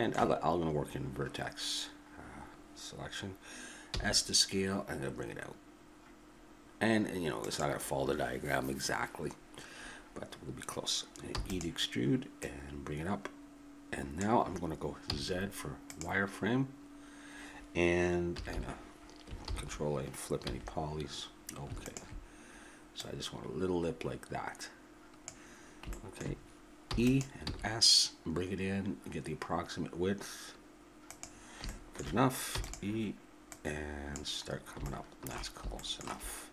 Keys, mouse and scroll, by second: 3.9 s, 11.3 e, 12.4 click, 15.1 z, 17.1-19.4 middle drag, 18.3 a, 18.5 a, 19.4 ctrl+n, 20.4 a, 21.8-24.6 drag, 26.9 e, 27.4 s, 32.5-33.5 middle drag, 32.5 e, 33.5-34.5 drag, 34.9 click, 35.2-36.5 middle drag.